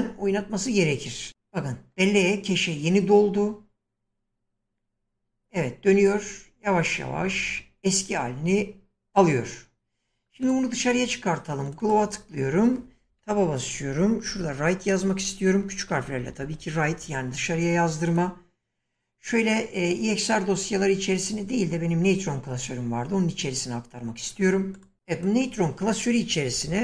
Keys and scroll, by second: 13.1 Tab, 14.3-16.9 typing, 26.3-26.8 typing.